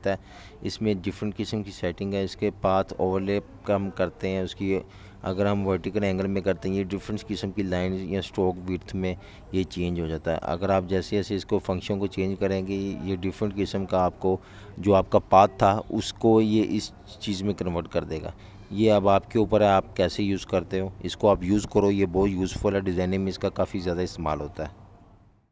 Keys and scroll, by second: 22.3-23.5 typing, 24.5 super+y, 24.9 super+y.